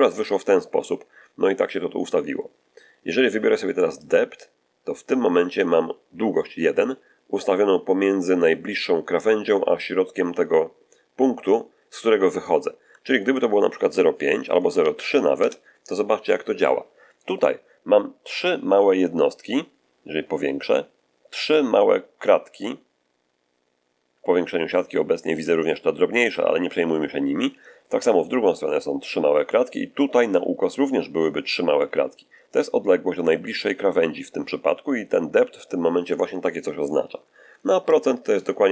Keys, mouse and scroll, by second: 3.9 click, 13.2 click, 14.8 ., 14.8 3, 15.3 Return, 19.7-20.1 scroll up 1, 37.8 click.